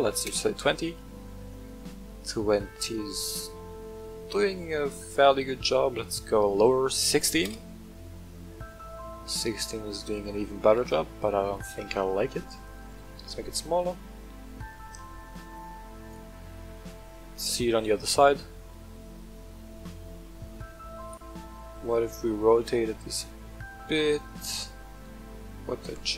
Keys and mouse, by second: 1.5-4.5 middle drag, 6.1-8.1 drag, 8.6-10.7 middle drag, 11.2-11.6 middle drag, 12.6-16.1 shift+drag, 17.4-18.2 middle drag, 18.6-20.6 middle drag, 21.0 right click, 22.3 r, 22.6 z.